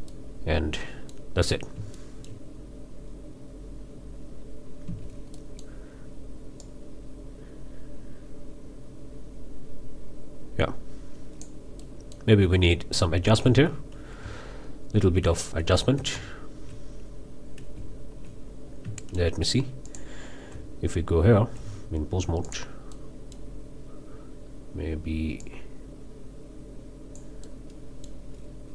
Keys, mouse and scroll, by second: 0.1-1.3 middle drag, 1.5-1.8 scroll up 3, 1.9-2.5 shift+middle drag, 2.5 shift+scroll down 2, 4.8 space, 5.3-5.8 middle drag, 6.6-11.6 drag, 11.8-12.3 middle drag, 14.2 Tab, 17.8 z, 18.7 scroll up 1, 19.0-19.4 shift+middle drag, 19.9 drag, 20.5 Tab, 22.4 drag, 22.9-23.5 drag, 25.4-27.4 drag, 27.4-28.3 drag.